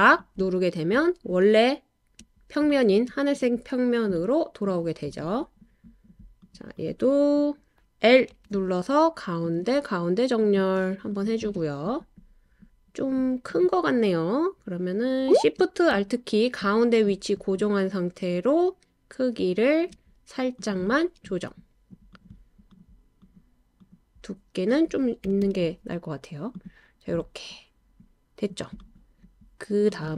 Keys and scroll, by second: 8.3 i, 25.3 5, 25.4 Return.